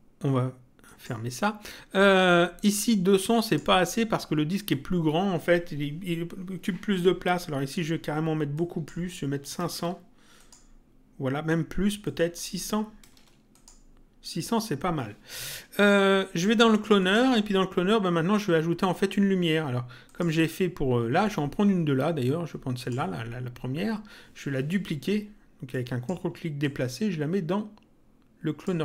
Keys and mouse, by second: 0.8 click, 3.4 click, 8.5 click, 10.4 click, 12.0 click, 13.5 click, 17.0 click, 20.0 click, 22.8 click, 25.7 click, 26.6 ctrl+click.